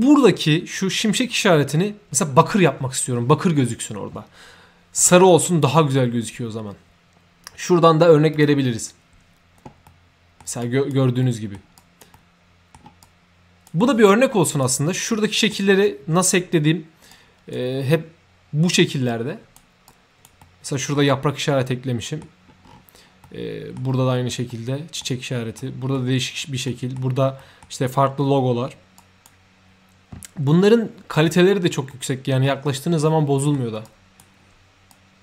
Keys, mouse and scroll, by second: 8.3 click, 9.8 middle click, 10.6 right click, 11.2 middle click, 11.7 right drag, 12.1 middle click, 13.0 right click, 14.1-14.6 right drag, 14.4 3, 15.1 middle click, 17.1-17.5 right drag, 19.1-19.5 right drag, 19.9-20.2 right drag, 20.4 middle click, 21.7 middle click, 22.7 scroll down 1, 23.2 middle click, 24.5 middle click, 25.6 middle click, 26.7 middle click, 27.4 middle click, 29.0 right click, 30.5 middle click, 31.9 middle click, 32.1 3, 33.0 middle click, 33.8 right click, 34.9-35.2 right drag.